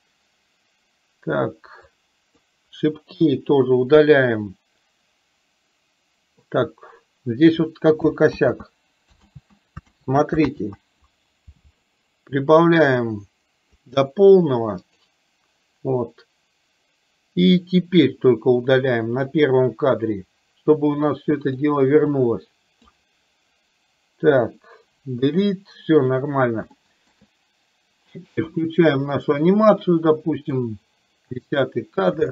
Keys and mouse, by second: 2.1-2.6 drag, 3.3 Delete, 8.4 ctrl+z, 9.3 ctrl+z, 10.7 ctrl+z, 13.1 click, 15.1 click, 19.4 click, 21.2 click, 22.3 click, 25.2 Delete, 26.8 shift+middle click, 28.7 click, 30.7-31.7 drag.